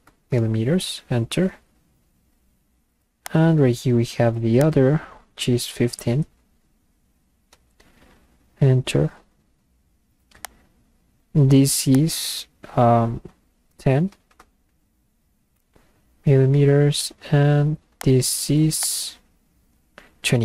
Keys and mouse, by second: 0.7 Return, 3.3 click, 4.6 click, 7.8 Return, 10.5 click, 11.9 click, 15.5 Return, 18.0 click, 18.8 click.